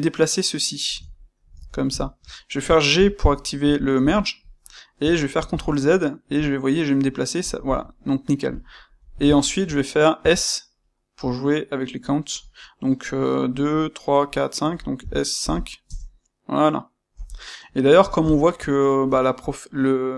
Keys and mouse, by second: 1.0 ctrl+middle click, 8.5 ctrl+middle click, 9.3-20.1 shift+middle drag, 17.1 KP_Enter.